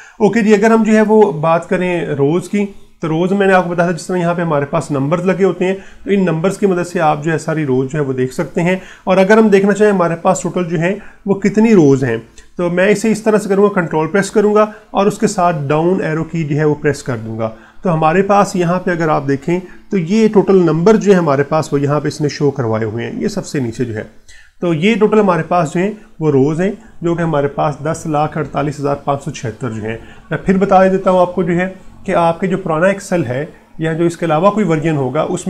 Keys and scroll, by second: 0.3 ctrl+Left, 2.8 Down, 5.0 Down, 16.8 ctrl+Down, 21.9 ctrl+1.